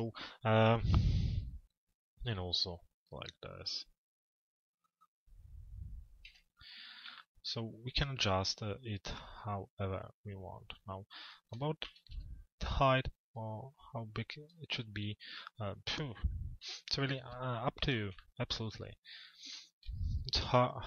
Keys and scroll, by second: 5.9 p, 12.1 z, 16.3 p.